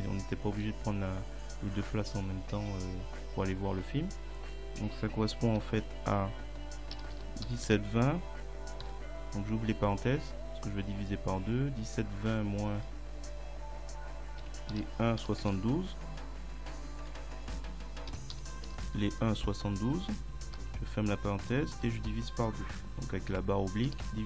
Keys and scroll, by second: 5.6 5, 7.0 1, 7.2 7, 7.5 ., 7.7 2, 14.5 1, 18.1 1, 19.2 2, 20.6 [, 21.8 /, 23.9 2.